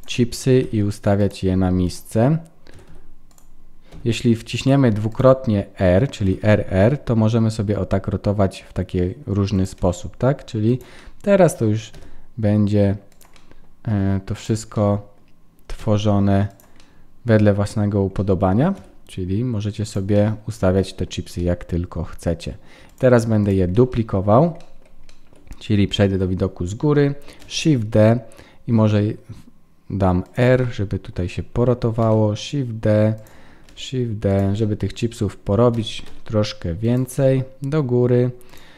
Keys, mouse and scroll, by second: 1.2 g, 1.8 click, 2.7 r, 4.5 g, 5.1 click, 6.2 r, 10.7 g, 11.0 middle click, 11.9 g, 13.3 middle click, 14.3 click, 14.7 middle click, 15.8 g, 16.8 middle click, 18.7 middle click, 18.7 r, 20.1 middle click, 20.8 shift+middle click, 21.4 middle click, 22.9 shift+click, 23.7 middle click, 25.1 shift+middle click, 25.2 shift+middle click, 26.1 KP_7, 27.4 shift+d, 30.6 middle click, 32.0 shift+d, 33.7 shift+d, 34.6 middle click, 35.7 g, 37.1 middle click, 38.5 click.